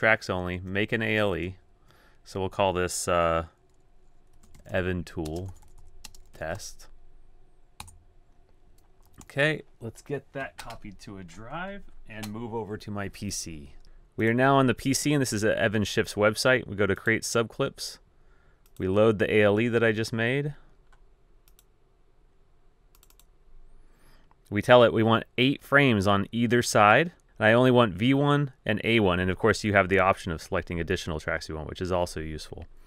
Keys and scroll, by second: 0.5 z, 4.2-7.1 typing, 7.9 Return, 9.1 typing, 10.9 super+h.